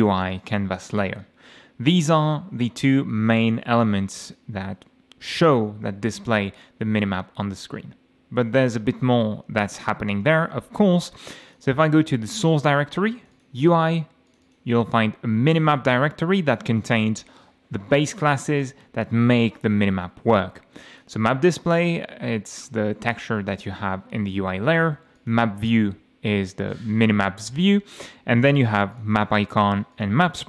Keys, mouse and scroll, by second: 0.9 click, 2.9-3.3 scroll up 1, 3.5 scroll up 1, 4.2 click, 11.5 click, 12.2 scroll down 2, 13.1 click, 14.3 click, 15.4-15.7 scroll down 2, 21.0 click, 22.6-22.9 scroll down 1, 23.6 click, 24.1-24.7 scroll up 1, 25.2 click, 26.0 scroll down 1, 26.7 click, 27.9-28.2 scroll up 1, 28.9 click, 29.9 click.